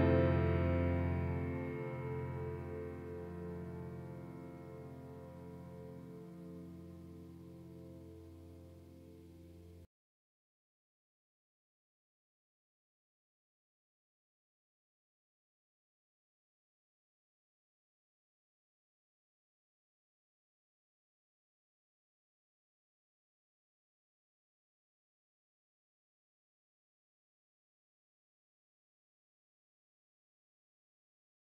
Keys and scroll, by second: 0.0-0.7 typing, 2.0-4.5 typing, 7.8 ctrl+w, 11.2 ctrl+b, 12.8 ctrl+Down, 14.2 ctrl+Return, 16.5 ctrl+b, 17.2 ctrl+Down, 18.3 ctrl+Return, 22.5 ctrl+Page_Down, 24.8 ctrl+Page_Down, 25.5 ctrl+Page_Down, 27.1 ctrl+Page_Up, 29.5 ctrl+Page_Down.